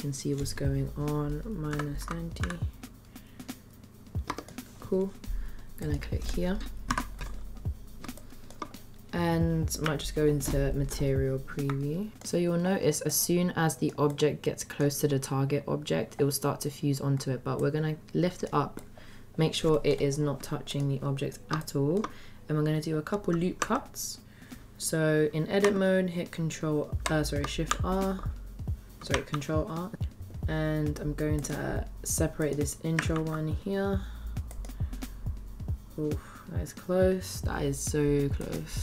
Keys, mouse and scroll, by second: 5.7 click, 6.8 n, 8.1-8.6 shift+middle drag, 9.8 z, 12.1 middle click, 13.0 click, 14.2-14.8 middle drag, 17.6-18.7 drag, 18.9-20.7 middle drag, 21.6 shift+drag, 21.8 shift+middle click, 22.0 scroll up 2, 22.8 middle click, 23.6 Tab, 27.6 shift+r, 29.3 ctrl+r, 33.1 ctrl+r.